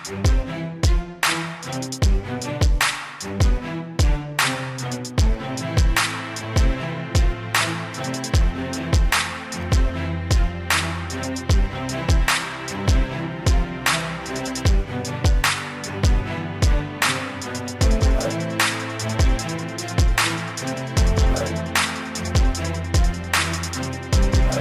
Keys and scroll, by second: 13.2 ctrl+j, 13.7 ctrl+j, 15.3 ctrl+j.